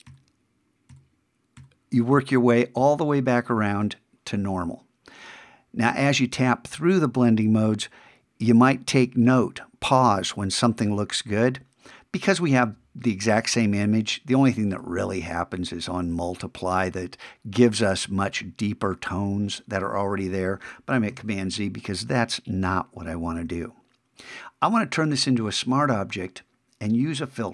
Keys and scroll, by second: 21.1 super+z.